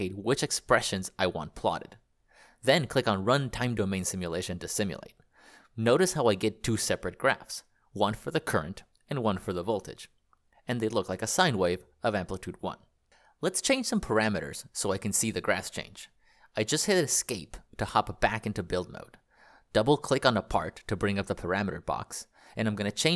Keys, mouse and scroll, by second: 0.2 click, 13.9 click, 15.0 Escape.